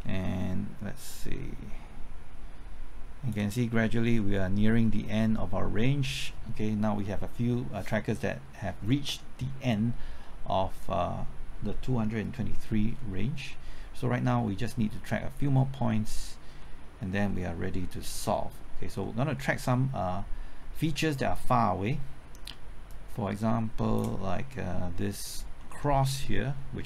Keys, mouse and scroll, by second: 0.2 middle click, 1.0-3.3 drag, 3.7 scroll down 1, 4.6-5.2 scroll up 1, 5.2 middle click, 5.7 scroll up 1, 12.7-13.1 scroll down 1, 13.1-14.3 middle drag, 18.0 scroll up 1, 18.3 middle click, 18.7 scroll up 1, 19.0 middle click, 19.3-19.7 scroll up 1, 19.7 middle click, 20.0-22.8 scroll up 1, 22.8-24.3 drag, 25.2-25.6 scroll up 1, 25.6 middle click, 25.8-26.3 scroll up 1, 26.3 middle click.